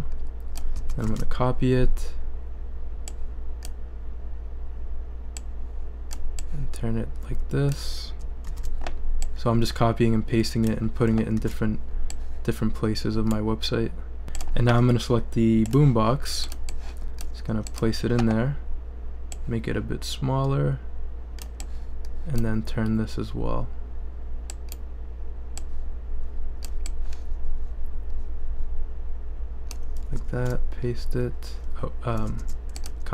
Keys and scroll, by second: 0.9 super+c, 1.0 super+v, 8.4 super+v, 11.3 super+v, 30.3 super+v, 32.4 super+z.